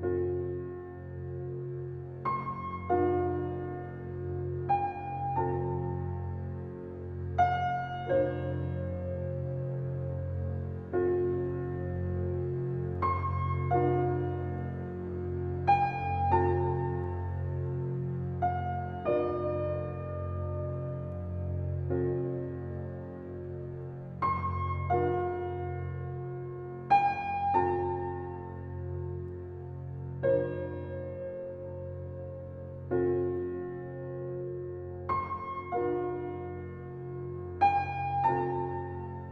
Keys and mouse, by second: 1.5 0, 1.7 Return, 3.8 click, 4.8 typing, 5.2 Return, 8.9 click, 9.6 0, 10.0 Return, 10.9 click, 11.7 0, 12.0 Return, 16.7 click, 17.9 typing, 18.3 Return, 23.2-24.2 drag, 25.1-26.3 typing, 26.0 Return, 29.1-29.8 ctrl+alt+drag, 30.9 click, 31.5 click, 32.4-33.0 alt+drag, 33.4 click, 33.6-34.3 drag, 33.6 typing, 34.6-35.1 typing, 36.3 click, 37.6-39.0 alt+middle drag, 38.0 alt+click, 38.6-39.3 typing.